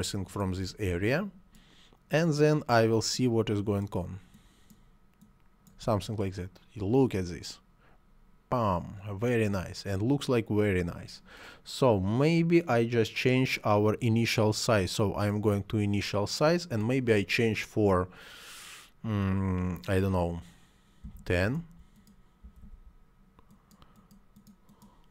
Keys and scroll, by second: 20.8 1, 20.9 0, 21.2 Return, 22.2 1, 22.4 ..